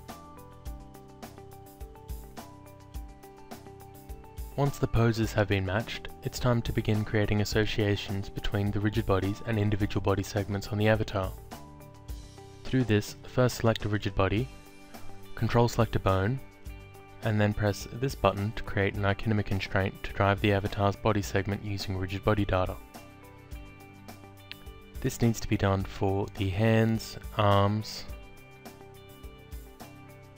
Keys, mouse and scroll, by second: 2.0 alt+middle click, 3.2 alt+click, 8.3 click, 10.7 click, 15.5 ctrl+click, 17.6 click, 19.6 alt+click, 21.1 click, 21.9 ctrl+click, 24.2 click, 26.6 alt+click, 27.7 alt+click, 29.2 ctrl+click.